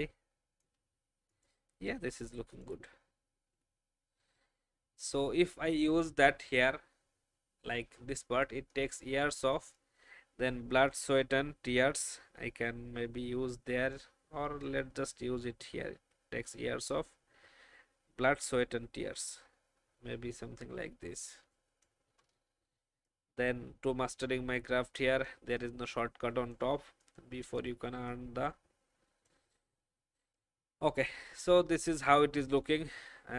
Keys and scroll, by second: 3.4 shift+Down.